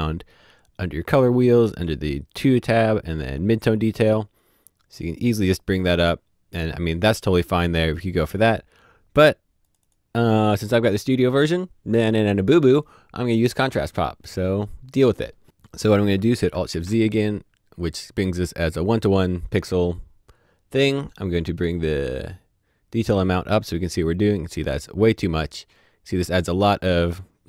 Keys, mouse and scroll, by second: 1.6 click, 3.7 click, 9.6 click, 13.6 click, 16.5 click, 17.2 middle click, 23.0 click.